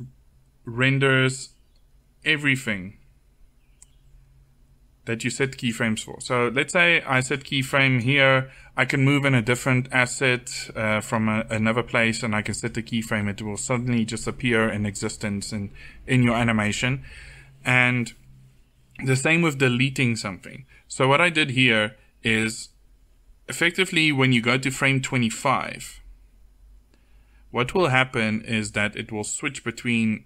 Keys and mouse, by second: 6.9-9.5 drag, 16.3-30.2 drag.